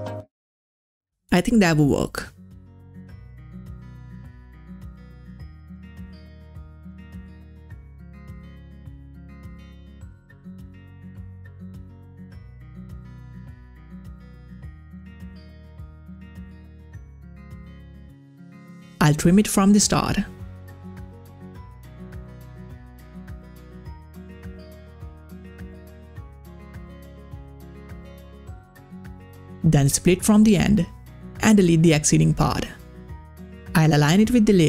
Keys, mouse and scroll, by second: 0.0-3.5 drag, 3.5 scroll down 1, 4.7-8.2 drag, 9.0 click, 12.0 click, 14.7 click, 14.8-15.9 drag, 16.1-17.4 drag, 18.9 middle click, 19.2-27.4 drag, 28.7 click, 29.2 scroll down 1, 30.2 click, 30.7 s, 31.5 click, 34.0-34.6 drag.